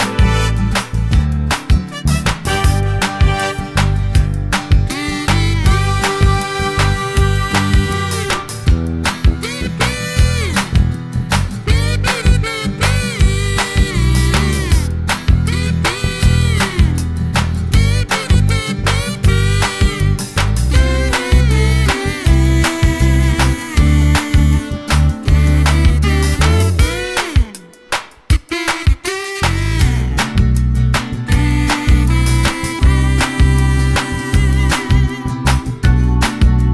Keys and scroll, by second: 11.9 d, 33.9 super+c, 34.1 super+v.